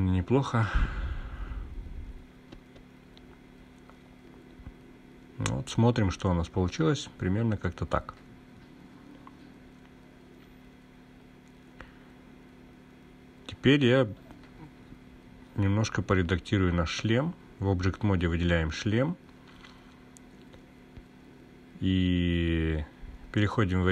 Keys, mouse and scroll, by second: 1.2-7.0 drag, 1.2 scroll down 1, 12.6-13.6 drag, 14.1 click, 16.5 /, 18.7-19.8 drag, 23.2-23.9 drag.